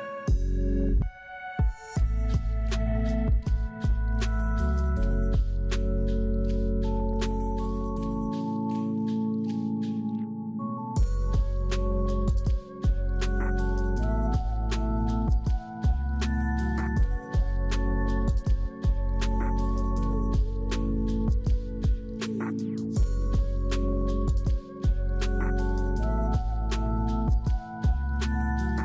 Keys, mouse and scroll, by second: 8.0 scroll up 6, 8.5-9.3 scroll down 2, 24.1 double click, 25.3 double click, 25.5 6, 25.8 Return, 28.0 scroll up 2.